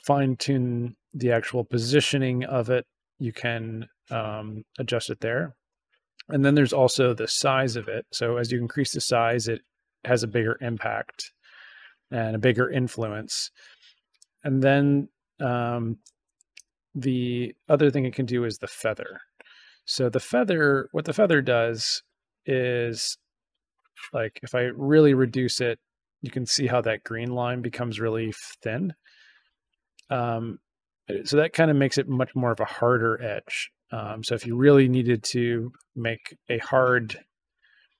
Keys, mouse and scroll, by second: 1.8-5.0 drag, 5.8-14.1 drag, 15.3 click, 17.9 click, 19.0 click, 20.3 click, 22.7-31.2 drag, 32.0 click, 32.6-35.7 drag.